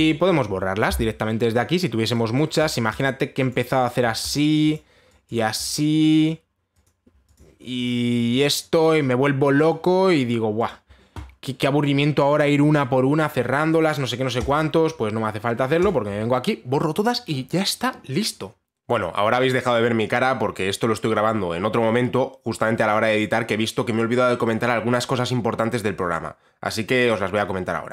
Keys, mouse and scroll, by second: 0.6 click, 3.0 click, 3.3 click, 3.6 click, 4.1 click, 4.5 click, 4.9 click, 5.4 click, 5.9 click, 6.3 click, 6.9 click, 7.5 click, 8.0 click, 8.5 click, 9.0 click, 9.4 click, 10.3 click, 10.5 click, 11.3 click, 15.1 click, 16.5 click.